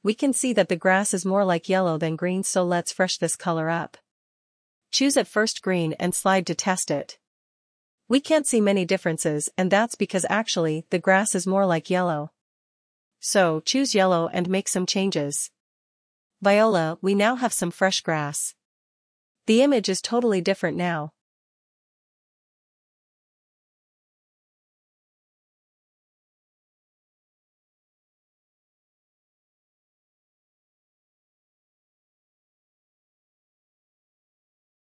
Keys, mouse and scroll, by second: 2.4 click, 3.1 click, 4.7 click, 11.4 click, 17.7 click, 29.9 click, 31.8 click, 33.0 click.